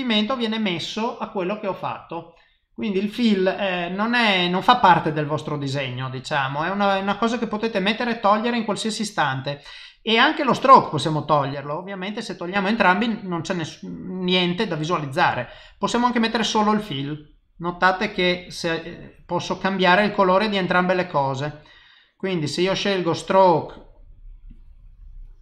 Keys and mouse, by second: 0.2 click, 1.2 click, 6.5 click, 8.3 click, 11.1 click, 15.9 click, 17.6 click, 18.3 click, 18.7 click, 20.3 click, 21.1 click, 21.5 click, 22.7 click.